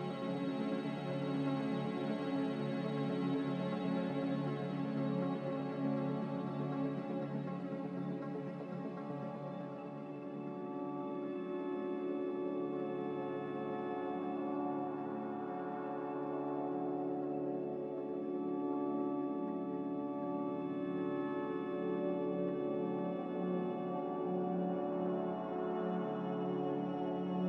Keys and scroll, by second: 4.0 z, 7.6-8.5 typing, 9.0 Return.